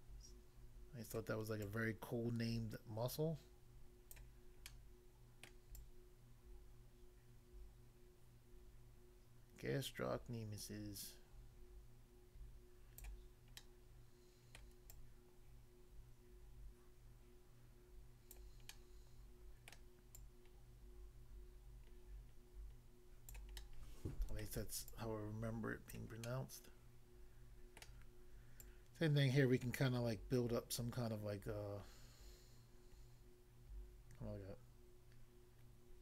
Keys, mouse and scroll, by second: 1.2 click, 1.7 click, 4.2 click, 4.7 middle click, 5.5 middle click, 5.8 click, 13.0 click, 13.6 middle click, 14.6 middle click, 14.9 click, 18.3 click, 18.7 middle click, 19.7 middle click, 20.2 click, 23.3 click, 23.6 middle click, 24.4 middle click, 24.9 click, 25.9 click, 26.2 middle click, 27.8 middle click, 28.6 click.